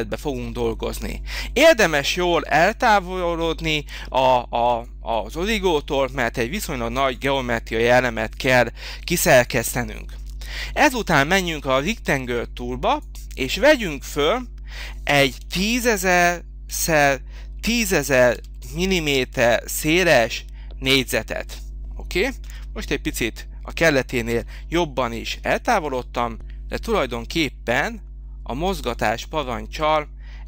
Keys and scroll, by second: 15.4 1, 15.7 0, 16.3 0, 18.4 0, 20.9 Return, 22.4 h, 24.4 m.